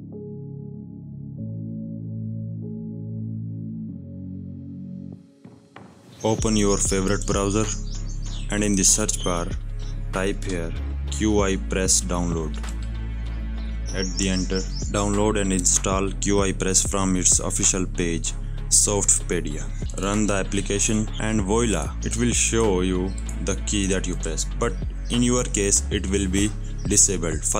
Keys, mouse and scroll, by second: 1.3 click, 7.0 click, 10.1-14.2 typing, 19.8 click, 21.8 click, 22.0 right click, 22.4 click, 23.1 right click, 23.8 click.